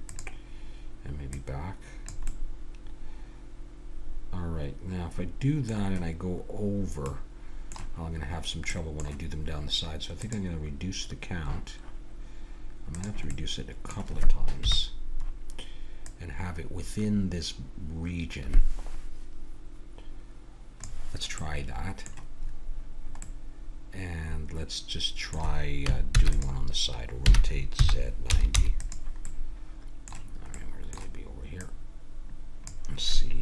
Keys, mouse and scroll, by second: 0.1-3.0 drag, 2.3 middle click, 3.0 middle click, 4.2-7.1 middle drag, 7.2-10.2 middle drag, 10.2-12.0 drag, 12.9 click, 13.3-14.6 middle drag, 14.6 KP_1, 16.1-17.8 drag, 21.4-24.9 middle drag, 26.1 shift+d, 27.2 r, 29.3-30.5 middle drag, 31.6-33.4 drag.